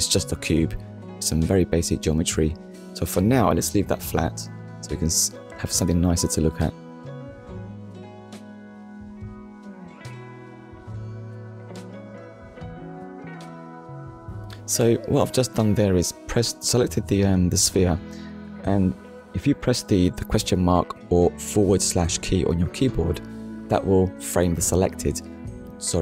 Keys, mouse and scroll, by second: 1.3 click, 2.1 right click, 4.3 click, 5.4 click, 5.9 middle click, 6.5-6.9 scroll down 2, 7.0 shift+middle click, 7.6 middle click, 9.7 click, 22.1 click.